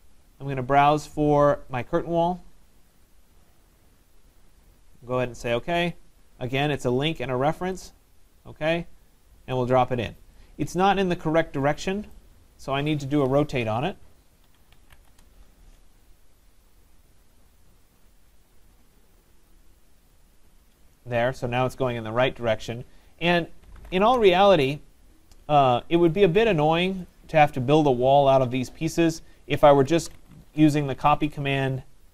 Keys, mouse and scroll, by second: 1.9 click, 3.1 click, 7.9 click, 9.6 click, 12.1 right click, 12.7 middle click, 12.7 middle click, 12.8-13.4 scroll, 13.5 middle click, 14.2-15.5 typing, 17.4 click, 19.5 shift+click, 20.6 shift+click, 23.7-24.7 typing, 26.8 click, 27.1 click, 28.1-32.1 typing, 28.2 middle click, 28.3 middle click, 28.5 middle click, 28.6-29.2 middle click, 29.1 middle click, 31.4 middle click, 31.5 middle click, 31.7-32.1 scroll.